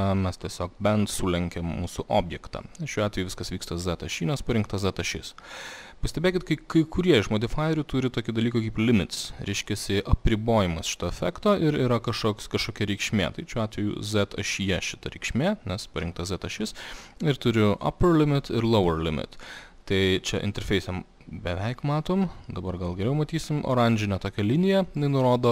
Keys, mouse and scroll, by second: 0.0-1.6 drag, 3.2 click, 11.9 click, 15.4-16.9 drag, 17.8-23.0 drag.